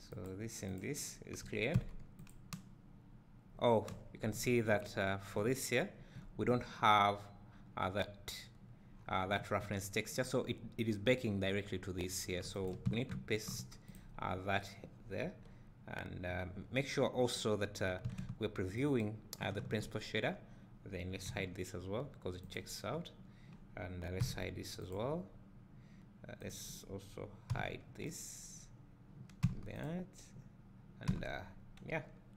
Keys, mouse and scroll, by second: 0.2 click, 0.7 click, 1.8 h, 2.3 click, 13.2 ctrl+v, 13.9 click, 18.8 ctrl+shift+click, 21.3 h, 22.6 click, 24.2 h, 25.0 click, 26.4-26.7 drag, 27.5 h, 28.2 click, 29.5 h, 29.9 click, 31.3 h.